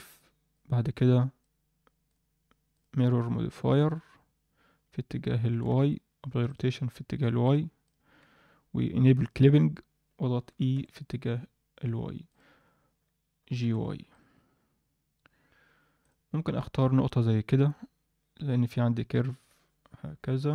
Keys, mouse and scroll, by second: 0.5-1.5 drag, 2.0 click, 2.7-3.8 drag, 5.4 Tab, 5.7 ctrl+a, 7.4 click, 7.8 click, 8.2 Tab, 9.2 click, 10.5 e, 16.0 click, 20.1 d.